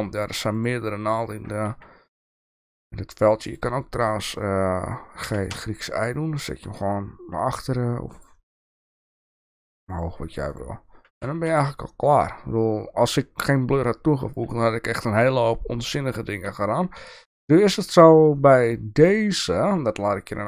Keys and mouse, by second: 0.5 click, 1.7 g, 5.2 g, 8.7 g, 11.1 Tab, 17.5 middle click, 17.9-20.4 shift+middle drag.